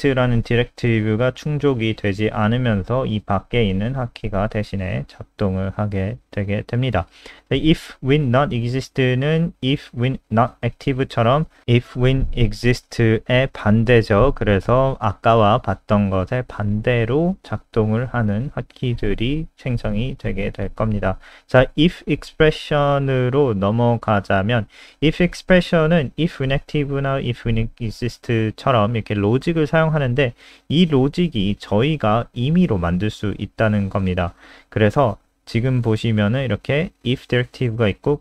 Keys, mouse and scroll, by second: 0.3 super+3, 0.9 click, 3.4-3.9 scroll down 1, 4.0-4.8 scroll down 2, 4.1 click, 5.4 click, 6.4 ctrl+c, 6.6 click, 8.1 ctrl+v, 8.3 ctrl+s, 9.7 click, 16.6 click, 17.0 click, 17.9-18.3 scroll down 2, 19.1 scroll down 1, 20.2 click, 21.3-21.8 scroll down 2, 21.8-22.6 scroll down 2, 22.6 click, 22.8-23.5 scroll up 1, 23.5 shift+click, 24.3 shift+Up, 24.8 shift+Right, 24.8 ctrl+c, 25.0 click, 25.3 click, 26.1 BackSpace, 26.3 ctrl+v, 30.0 click.